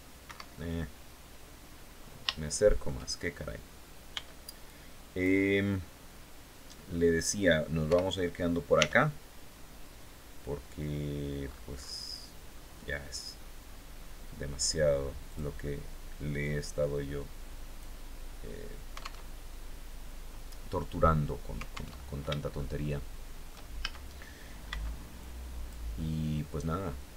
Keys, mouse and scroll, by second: 1.1-1.7 scroll up 2, 1.7 shift+middle click, 2.6 shift+scroll up 2, 3.5 b, 4.1 click, 7.3 o, 8.2 r, 10.3-10.7 scroll down 2, 10.8-11.2 scroll up 2, 13.0-13.7 scroll down 4, 14.7 click, 15.8-17.4 drag, 17.7-18.0 scroll down 1, 18.7 alt+Tab, 21.4 alt+Tab, 22.0-23.1 shift+right drag, 23.2 shift+a, 24.1 b, 24.6 click, 26.0-27.1 drag.